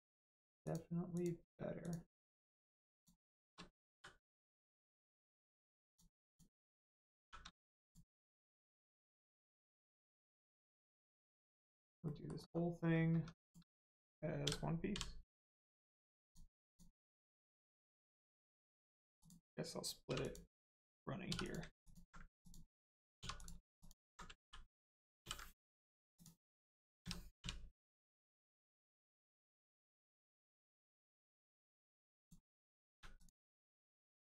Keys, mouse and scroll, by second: 0.1 shift+click, 0.6 shift+click, 1.1 shift+click, 1.7 shift+click, 2.3 shift+scroll up 1, 2.9 shift+click, 3.9 m, 5.2 click, 6.2 shift+click, 7.1 shift+r, 7.8 click, 8.3 middle click, 8.7 scroll down 1, 8.9 Tab, 9.9 middle click, 10.2 scroll down 1, 10.5 middle click, 12.3 scroll up 1, 12.4-12.7 scroll down 1, 12.7 Tab, 13.4 click, 16.1 click, 17.1-17.5 scroll down 1, 17.9 middle click, 18.3-18.8 scroll up 1, 18.8 middle click, 19.1 click, 20.0 3, 20.1 click, 21.2 2, 21.4 click, 21.8 alt+click, 22.3 click, 23.1 click, 23.1 2, 23.3 click, 23.7 alt+click, 26.1 click, 26.9 a, 28.2 click, 29.3-29.7 scroll up 1, 29.7 Tab, 30.6 middle click, 31.1 click, 31.4 middle click, 32.1 click, 32.9 a, 33.1 click.